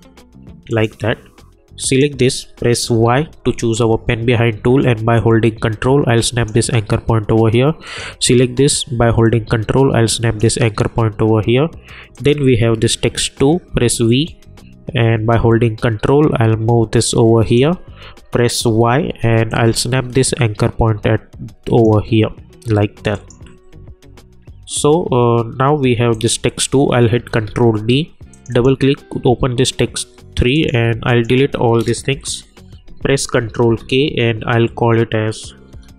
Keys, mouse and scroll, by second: 2.9 y, 5.1-12.8 drag, 13.7 v, 14.2-18.6 drag, 18.6 y, 19.8-22.0 ctrl+drag, 26.1 click, 27.3 ctrl+d, 28.3 click, 31.1 shift+click, 33.6 ctrl+k, 33.8 ctrl+Num_Lock, 35.5-35.9 typing.